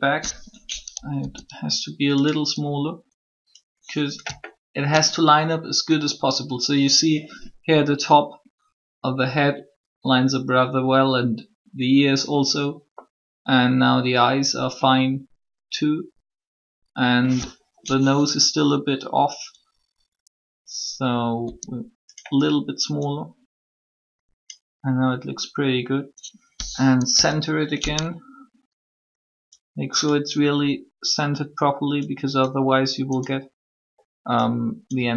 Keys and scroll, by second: 1.2 s, 21.4 s, 26.9 1.